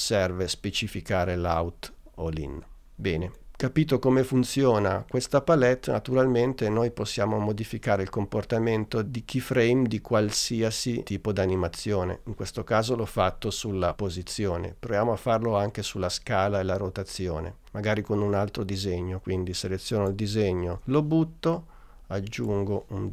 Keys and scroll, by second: 20.8 BackSpace.